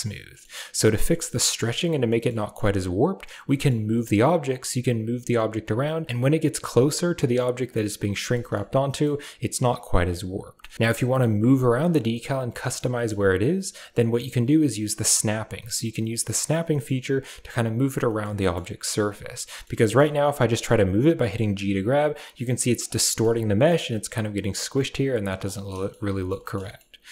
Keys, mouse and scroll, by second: 0.5 middle drag, 1.5 middle click, 2.1 middle drag, 2.4 middle click, 8.3 middle click, 8.6 g, 10.4 middle click, 10.7 g, 12.1-12.6 middle drag, 12.9 shift+middle click, 15.5 middle click, 18.0 shift+middle drag, 18.3 middle click, 19.7 shift+middle click, 23.0 middle click, 23.1 g, 25.5 middle click, 25.7 shift+middle click, 26.1 middle drag.